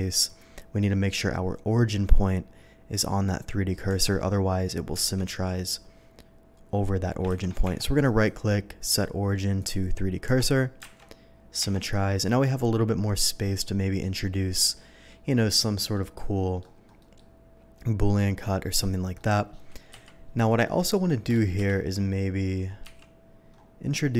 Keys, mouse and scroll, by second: 0.0 Tab, 3.9 Tab, 7.3 ctrl+z, 7.6 Tab, 8.0 right click, 9.6 click, 10.8 alt+x, 11.0 Tab, 11.6 Tab, 13.3-14.0 middle drag, 14.2-15.1 middle drag, 15.5-15.9 middle drag, 16.1-16.6 middle drag, 17.0 middle click, 18.6 middle click, 19.1 middle drag, 19.9 KP_3, 20.7 middle click, 22.8 d.